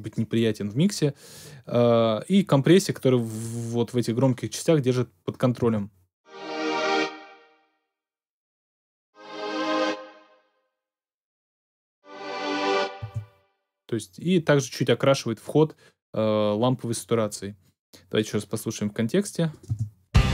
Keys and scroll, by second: 5.6 space, 13.0 space, 19.6 space.